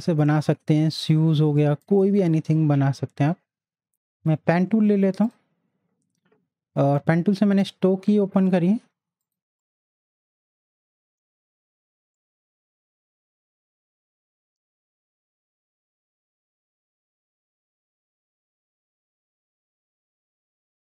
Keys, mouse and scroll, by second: 3.9 ctrl+z, 4.0 click, 9.2 click, 9.6 click, 9.6 click, 12.1 shift+click.